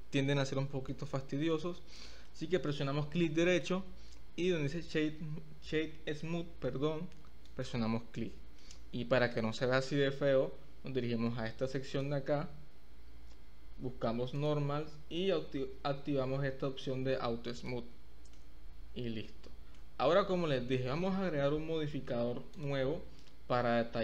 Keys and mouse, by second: 1.3 middle click, 2.3-2.7 middle drag, 3.5 right click, 8.6-9.6 middle drag, 14.4 click, 17.6 click, 18.3-19.8 middle drag, 20.7 click, 20.8 middle click, 22.5 click.